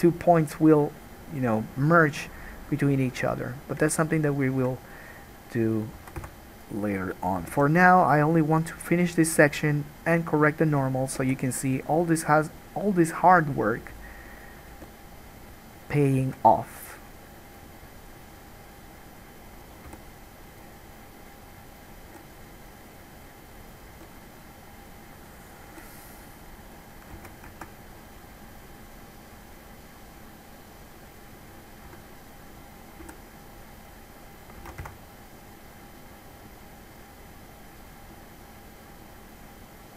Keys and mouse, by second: 6.3 alt+a, 6.4 1, 6.7 middle click, 7.6-10.9 drag, 7.6 g, 10.9 middle click, 11.3-14.1 drag, 11.3 g, 14.1 middle click, 14.3 click, 14.5 middle click, 14.6-23.8 drag, 14.9 g, 16.5 alt+a, 17.7 middle click, 17.7 right click, 20.1 g, 22.3 g, 23.8 middle click, 24.1-25.6 drag, 24.1 g, 25.6 middle click, 25.9-35.3 drag, 25.9 g, 27.4 alt+a, 32.1 2, 32.4 middle click, 32.4 right click, 33.2 g, 34.9 alt+a, 35.0 1.